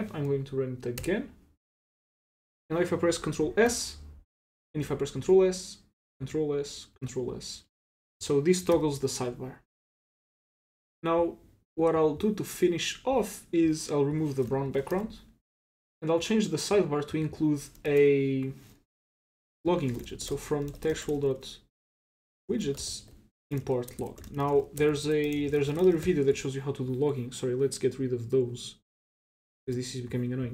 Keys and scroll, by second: 1.0 Return, 3.6 ctrl+s, 5.2 ctrl+s, 8.7 ctrl+c, 14.6 shift+super+k, 14.9 super+s, 17.8 Return, 19.4-26.5 typing, 29.6 super+q.